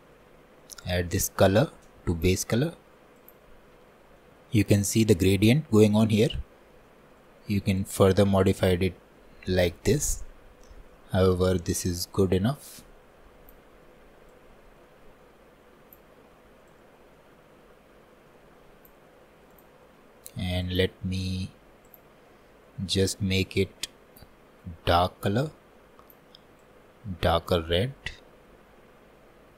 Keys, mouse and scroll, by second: 2.3 click, 10.8-24.9 drag.